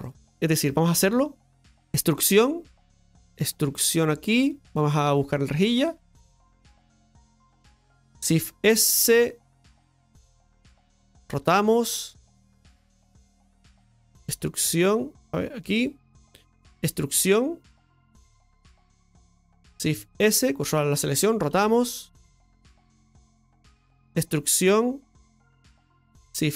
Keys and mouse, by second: 0.0 middle click, 5.3 click, 7.3 e, 8.3 shift+s, 9.0 shift+s, 9.6 shift+s.